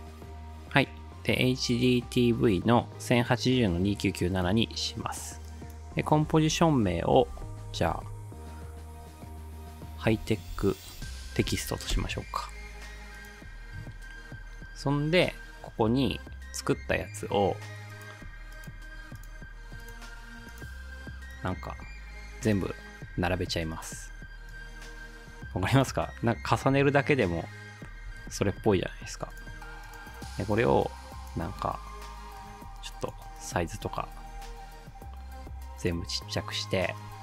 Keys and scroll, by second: 7.0-8.5 typing, 9.8-12.0 typing, 26.7 space, 28.1 space, 34.4 ctrl+z.